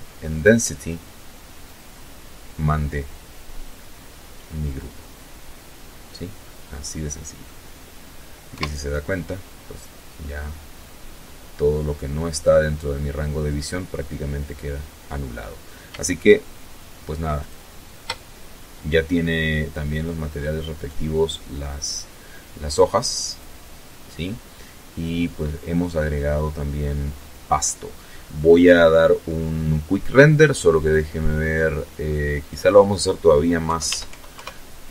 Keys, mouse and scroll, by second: 2.1-5.7 middle drag, 6.5 KP_0, 8.2-8.8 scroll up 2, 8.9-10.2 scroll up 2, 15.4 shift+click, 18.8 right click, 21.3 click, 28.8 click, 29.4-30.4 scroll down 2, 30.4 click, 31.6 KP_5, 31.9 Tab, 32.1 KP_5, 32.3 KP_Enter, 33.9-34.3 scroll up 2, 34.8 scroll down 2.